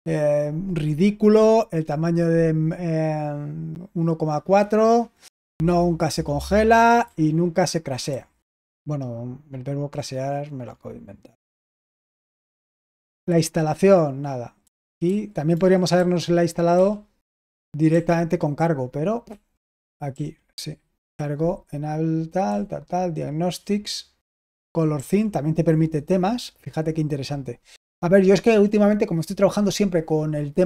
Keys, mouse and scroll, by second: 7.0 typing, 8.0 typing, 11.4-13.2 typing, 15.0-16.7 typing, 17.8 typing, 19.2-20.0 typing, 22.4 typing, 24.2-24.9 typing.